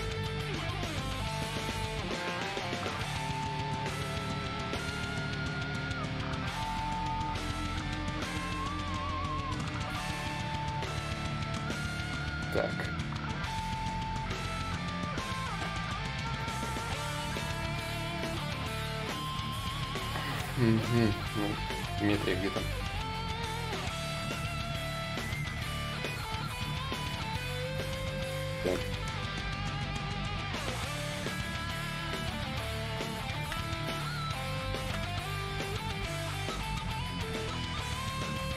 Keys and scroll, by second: 17.2-19.1 typing, 21.7 x, 22.3 s, 23.3 shift+d, 23.7 shift+d, 26.9 ctrl+z, 30.5 d, 32.3 d.